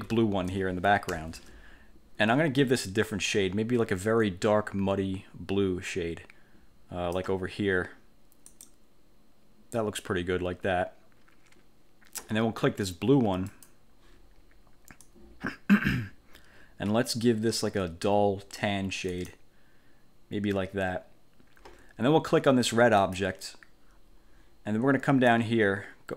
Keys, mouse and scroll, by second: 1.2 1, 3.4-7.4 drag, 8.6 click, 13.6 click, 15.2-17.4 drag, 19.3 click, 23.1 click, 25.4-26.1 drag.